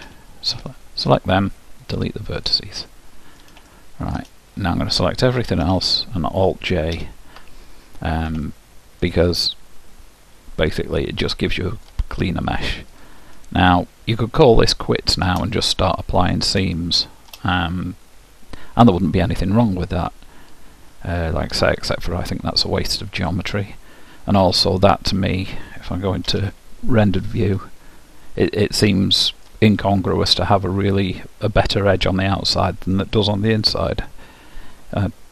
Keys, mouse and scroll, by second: 0.2 l, 1.2 Delete, 3.0-5.7 middle drag, 5.9 a, 7.1 alt+j, 8.8-11.4 middle drag, 13.1-14.8 drag, 14.3-19.7 middle drag, 23.4-25.3 middle drag, 26.4 z, 28.6-30.6 middle drag.